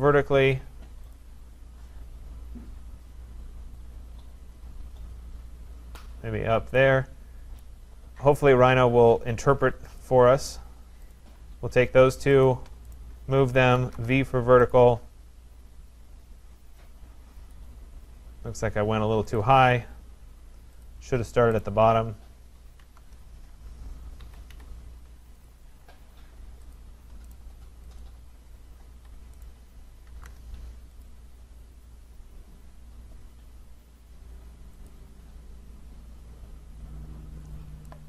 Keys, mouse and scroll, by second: 0.0-0.7 typing, 1.2 click, 5.8 click, 7.6 right click, 10.0 click, 11.1 click, 12.5 shift+click, 13.0 right click, 13.8 v, 14.0 Return, 14.7 click, 17.5 click, 18.0-18.6 scroll down 3, 18.5-19.0 scroll up 4, 19.4 shift+click, 20.9 click, 21.6 middle click, 21.6 right click, 22.8 v, 23.0 Return, 24.2 Escape, 24.5 Escape, 25.5 click, 26.8 shift+click, 27.3 right click, 28.0 click, 29.0 Escape, 29.4 right click, 30.1 v, 30.3 Return, 31.0 click, 32.2 v, 34.9 click, 35.8 scroll, 37.5-38.0 scroll, 37.5 click.